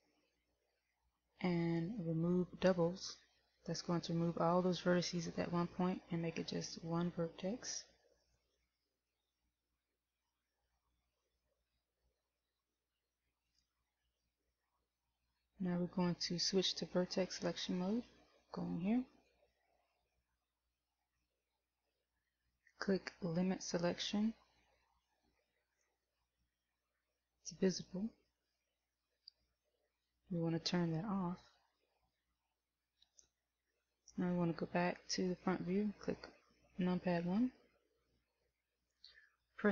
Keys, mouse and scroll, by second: 19.2 click, 29.9 click, 37.6 KP_1.